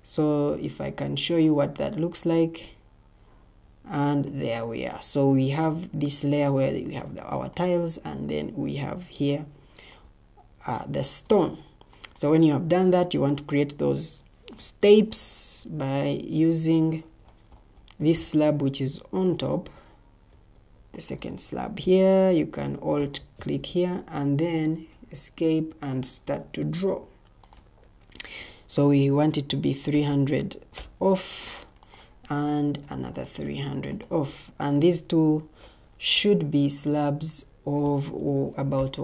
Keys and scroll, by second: 16.4 Escape, 20.2 shift+Tab, 23.7 Escape, 29.5-32.2 typing, 30.7 Return, 32.4 ctrl+d, 35.2 ctrl+t, 37.9-39.0 typing.